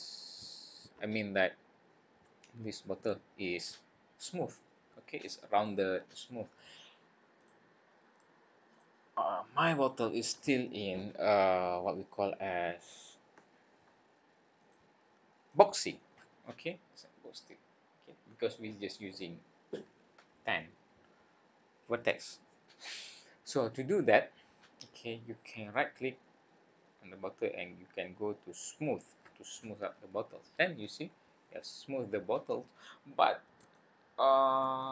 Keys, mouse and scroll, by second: 10.0 click, 14.5 click, 15.5 middle click, 16.1-16.5 scroll up 6, 16.6 middle click, 23.2 scroll down 2, 23.8 middle click, 25.5 right click, 32.5 scroll up 4, 33.7 shift+middle click, 34.8 middle click.